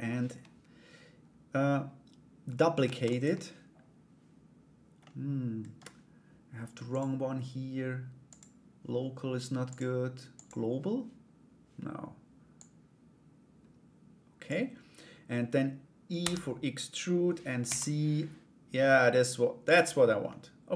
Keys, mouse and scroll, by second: 2.4 shift+d, 4.7 middle click, 6.5-8.4 drag, 9.3 click, 12.2-14.0 drag, 19.9 middle click, 20.5 Tab.